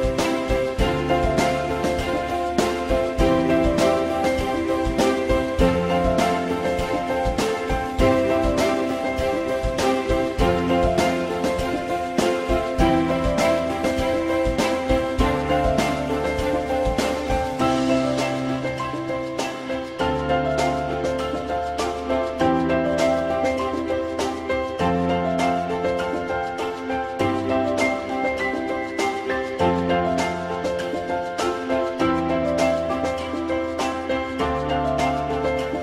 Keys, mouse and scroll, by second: 4.3-5.3 typing, 11.9 alt+middle click, 14.1 F4, 15.0 alt+middle click, 18.1 alt+middle click, 20.7 f, 21.0 alt+middle click, 22.6 alt+middle click, 29.3 ctrl+click, 29.9 ctrl+click, 30.3 alt+middle click, 34.9 alt+middle click.